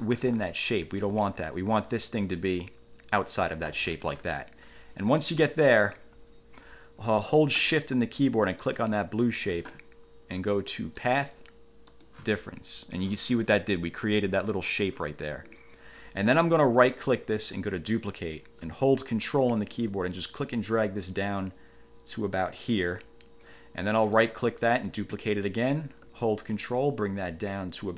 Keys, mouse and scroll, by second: 0.6-0.9 ctrl+scroll down 1, 1.2 ctrl+click, 2.6-4.0 ctrl+drag, 4.3 ctrl+click, 5.4 click, 5.6 1, 8.8 shift+click, 11.2 click, 12.0 click, 17.0 right click, 18.0 click, 20.0-23.2 ctrl+drag, 24.2 right click, 25.3 click, 26.7-27.9 ctrl+drag.